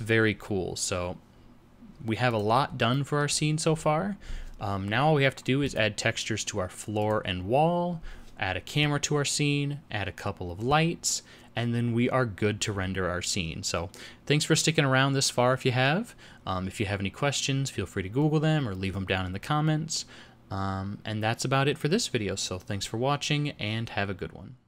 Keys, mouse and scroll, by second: 2.6 click, 2.9 middle click, 3.3 scroll down 1, 5.6 click.